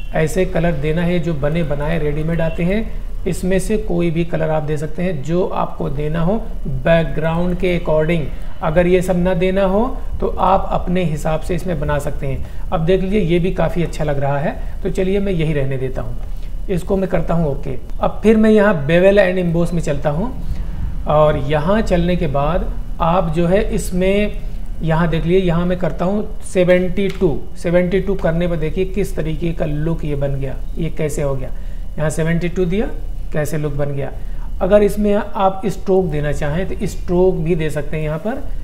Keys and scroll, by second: 26.8 KP_7, 27.2 KP_2.